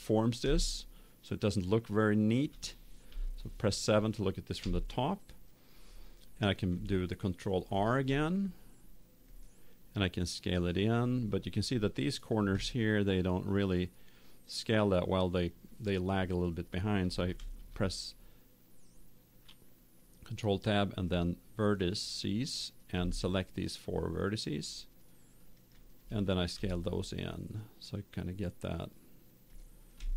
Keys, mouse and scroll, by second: 3.0 KP_7, 4.5 Tab, 7.6 ctrl+r, 11.8-13.6 drag, 14.6-15.7 middle drag, 14.6 scroll up 1, 16.2 middle click, 16.3 scroll down 1, 17.3 ctrl+Tab, 22.4-27.3 right drag, 26.5 s, 29.5 click.